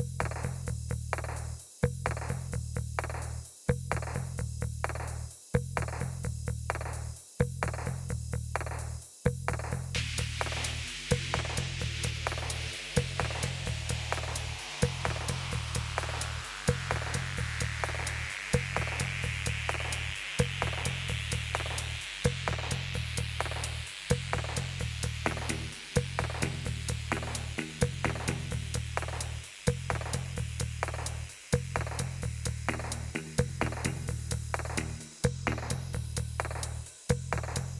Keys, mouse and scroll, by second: 4.3-5.7 drag, 6.4-7.0 scroll down 2, 7.0-8.0 scroll down 1, 8.2-9.3 drag, 10.7-12.1 drag, 14.4-15.8 drag, 17.4-22.4 typing, 23.3 Return, 23.9-25.1 typing, 26.4-36.1 typing, 37.3 typing.